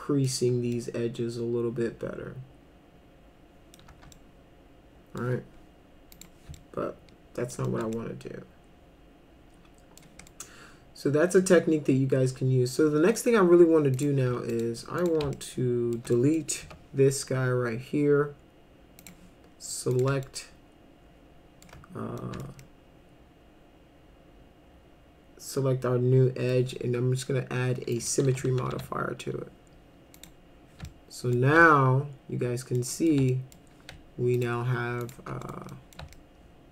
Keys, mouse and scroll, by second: 0.7-3.8 alt+middle drag, 4.1-5.2 alt+middle drag, 6.2 click, 6.5 alt+middle click, 7.7 alt+middle click, 7.9-10.0 alt+middle drag, 10.3-13.2 alt+middle drag, 13.9 click, 14.5 ctrl+click, 15.0 ctrl+click, 15.3 alt+middle click, 16.1 middle drag, 16.6 Delete, 19.0 click, 19.9 click, 20.2-21.6 alt+middle drag, 22.2 alt+middle click, 22.6-26.5 alt+middle drag, 28.0 click, 28.3 s, 28.5 s, 28.7 s, 30.2 click, 30.9 alt+middle click, 31.6-32.8 alt+middle drag, 32.9 middle click, 33.3 alt+middle click, 34.4 ctrl+click, 35.0 ctrl+click, 35.5 middle click, 35.7 middle click, 36.2 alt+middle click.